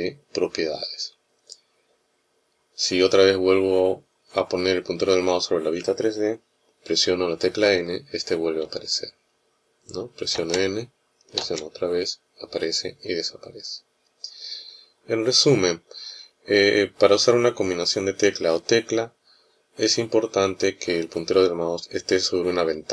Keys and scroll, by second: 7.4 n, 8.4 n, 10.1 n, 11.2 n.